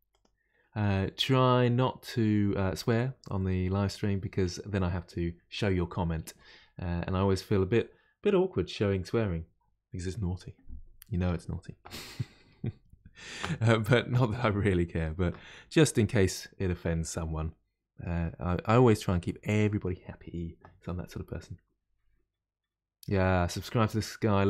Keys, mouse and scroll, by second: 16.6-18.2 middle drag, 18.2-18.8 scroll up 3, 18.8-21.8 middle drag.